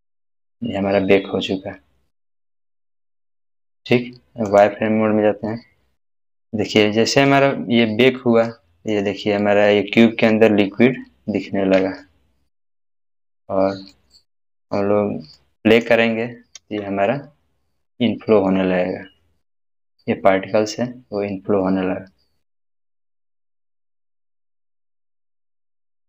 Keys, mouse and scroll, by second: 2.1 scroll down 1, 4.4 scroll down 1, 4.5 click, 5.5-7.0 middle drag, 7.4-8.2 scroll up 1, 8.2 scroll down 1, 8.4-9.1 middle drag, 10.9-11.8 scroll up 1, 12.0-12.9 shift+middle click, 13.1 scroll down 1, 13.9-14.8 middle click, 14.0 scroll down 1, 15.3-16.0 middle click, 16.6 space, 18.0-18.6 middle drag, 20.8-21.6 scroll down 1, 21.6-23.2 middle drag.